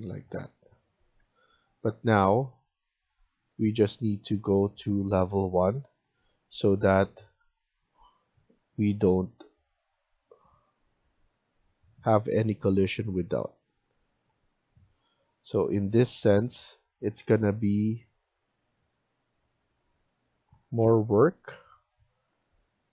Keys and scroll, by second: 1.2 Escape, 3.4 Delete.